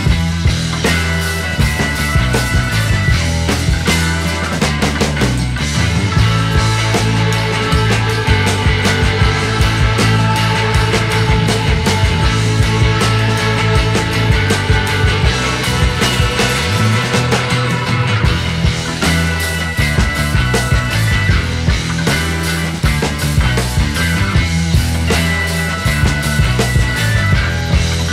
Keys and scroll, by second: 0.2 Escape.